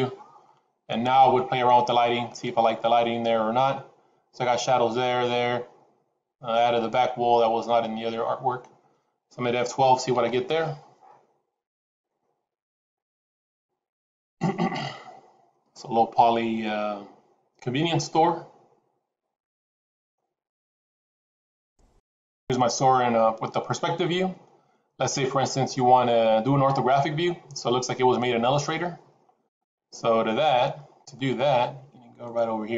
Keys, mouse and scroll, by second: 0.3-0.8 scroll up 4, 2.1 click.